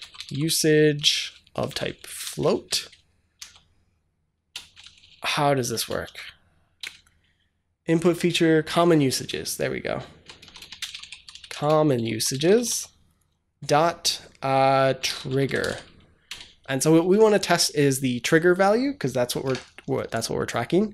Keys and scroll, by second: 0.0-2.9 typing, 4.4 BackSpace, 5.9 ., 6.7 BackSpace, 9.1 BackSpace, 10.4-12.9 typing, 14.6-16.0 typing, 16.1 Return.